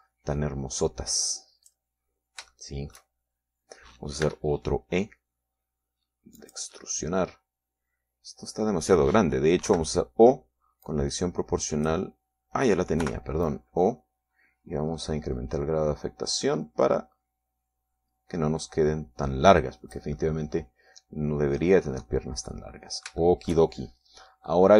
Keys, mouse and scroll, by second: 1.2-3.4 drag, 3.5 scroll down 2, 4.0 shift+middle click, 5.8 e, 7.9 click, 8.3-10.3 middle drag, 11.2 o, 12.4-13.6 drag, 14.5 o, 15.0 click, 15.5-16.2 scroll down 1, 16.2-16.8 scroll down 1, 16.8-18.4 scroll down 1, 21.7-23.3 middle drag, 23.4-24.0 scroll up 1, 24.0 middle click.